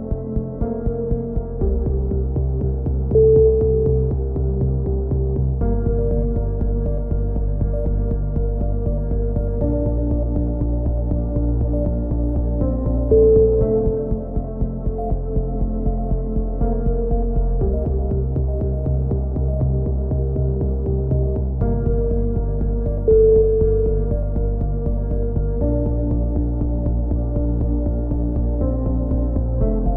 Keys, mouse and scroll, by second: 3.3 middle click, 4.2 z, 4.6 a, 5.9 KP_1, 6.2 z, 8.1 click, 8.8 z, 9.1 Tab, 12.6 z, 13.0 Tab, 13.7 click, 14.7-16.0 middle drag, 16.2 z, 16.6-17.7 drag, 17.9 k, 20.0 a, 20.3-21.6 drag, 20.7 Tab, 25.6 middle click, 25.9 Tab, 26.3 click, 28.7 KP_1, 29.4 z.